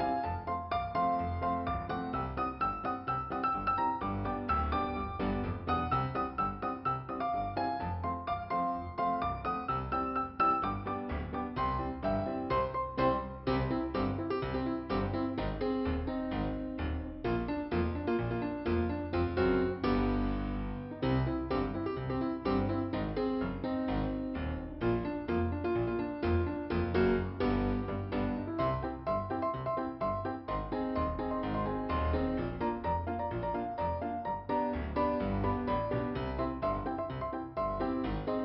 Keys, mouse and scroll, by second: 0.4 click, 4.5 click, 9.6 click, 11.9 click, 15.0-15.4 scroll down 3, 16.2 middle click, 16.9 scroll up 2, 19.3 ,, 21.5 click, 22.4 click, 23.5 click, 23.9 click, 26.1 click, 27.6-28.1 scroll down 3, 30.4 scroll up 1, 32.2 click, 33.3 click, 35.2 scroll down 1, 36.9 middle click, 37.7 scroll up 2.